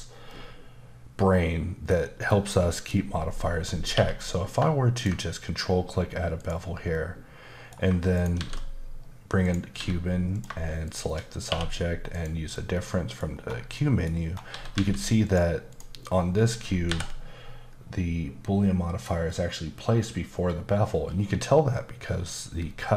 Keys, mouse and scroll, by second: 0.3 middle click, 2.5 middle click, 3.9 q, 4.9 ctrl+click, 5.7-6.4 scroll up 3, 6.4 click, 6.9 middle click, 8.1 shift+right click, 8.4 shift+a, 9.4 click, 9.7 s, 10.3 click, 10.8 shift+click, 11.5 q, 12.1 click, 12.7 middle click, 13.3-13.7 scroll up 2, 13.7 middle click, 14.2 scroll up 1, 14.5 typing, 15.2 click, 15.7 click, 16.9 n.